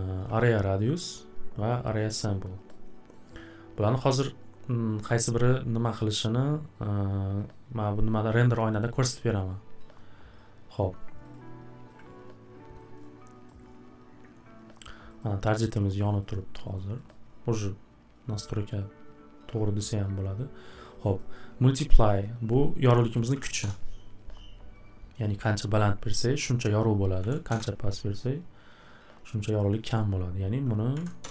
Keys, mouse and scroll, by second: 1.0 click, 2.7 click, 11.3 click, 12.0 click, 13.5 click, 14.8 click, 15.2 click, 15.9 click, 16.3 click, 16.7 click, 17.1 click, 19.9 right click, 21.0 click, 21.2 click, 22.1 click, 22.2 click, 23.3 1, 23.6 Return, 27.2 typing, 27.5 Return, 30.9 typing, 31.2 Return.